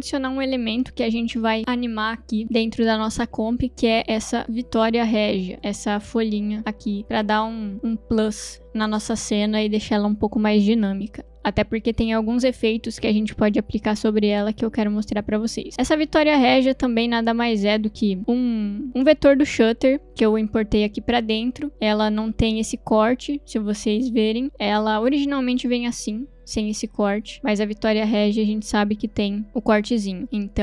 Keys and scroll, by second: 13.7 s, 23.5 m.